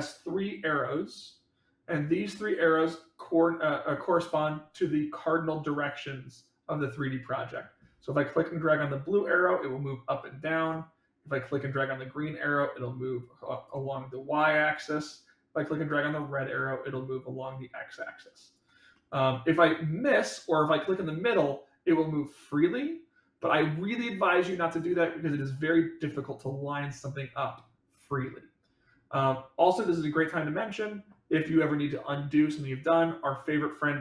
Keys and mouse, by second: 2.8-3.9 middle drag, 5.8-7.5 middle drag, 8.8-10.6 drag, 11.4-13.6 drag, 16.1-18.5 drag, 18.9 middle click, 21.0-27.1 drag, 29.5-30.6 middle drag.